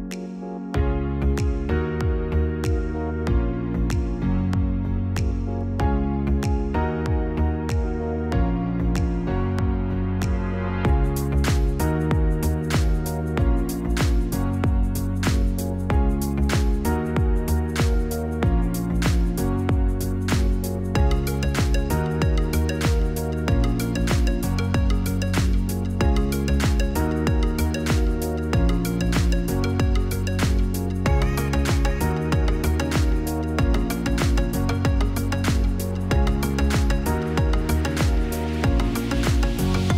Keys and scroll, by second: 20.5-21.4 typing, 26.5-27.5 typing, 28.7 ctrl+c, 28.9 ctrl+v, 30.9 n.